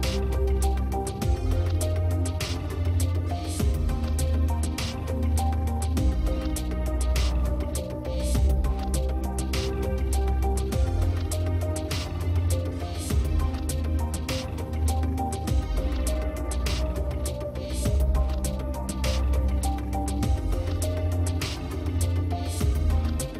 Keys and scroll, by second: 15.6 space, 21.5 ctrl+alt+z.